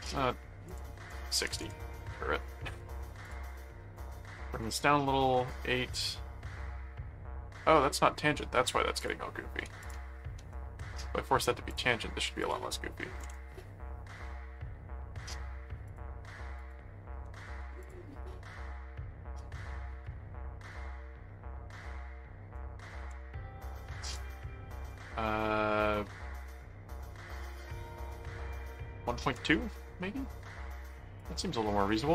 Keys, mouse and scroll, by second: 0.7 click, 3.2 click, 9.0 ctrl+click, 9.8 ctrl+alt+click, 10.4 alt+a, 11.7 click, 12.4 click, 15.8 ctrl+click, 16.6 ctrl+click, 17.3 alt+a, 17.8 click, 21.7 click, 24.0 click, 31.1-32.1 drag.